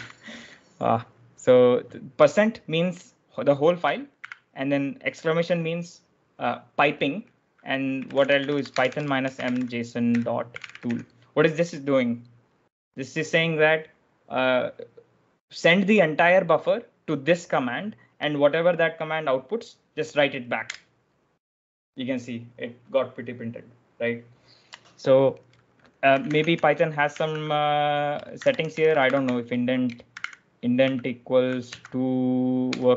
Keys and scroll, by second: 0.0-0.8 typing, 4.0 shift+1, 7.6-11.2 typing, 20.5 Return, 21.8 Return, 25.6-32.9 typing.